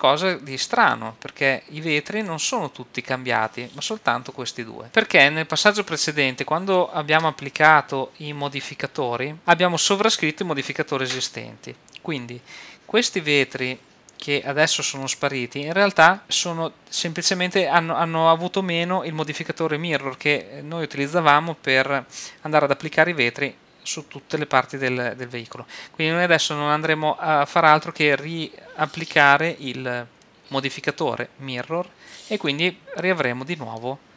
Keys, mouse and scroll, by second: 1.8-5.2 middle drag, 7.0-10.2 middle drag, 15.0-16.2 middle drag, 33.8 middle click.